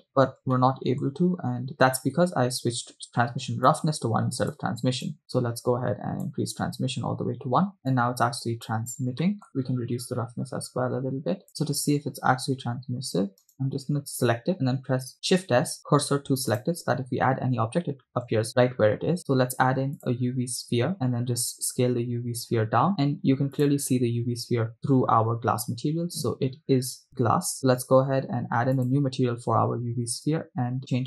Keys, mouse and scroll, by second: 0.7-1.2 shift+middle drag, 3.7 click, 5.1-7.8 drag, 8.0 click, 9.3 middle click, 9.6-11.5 drag, 13.6 right click, 15.2 shift+s, 18.4 shift+a, 20.9 s, 23.7-24.1 drag, 28.8-29.3 drag, 30.8 scroll down 1, 30.9 click.